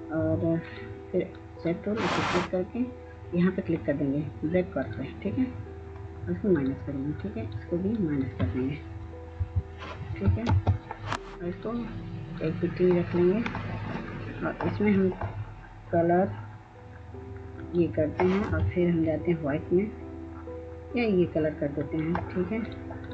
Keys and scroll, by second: 9.7 Delete, 10.8 ctrl+space.